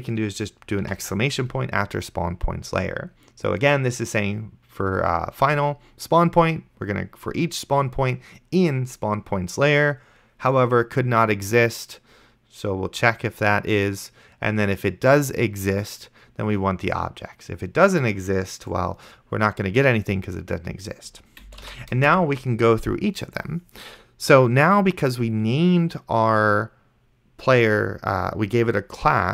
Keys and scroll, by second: 1.1 shift+1, 21.9 shift+[, 22.0 Return.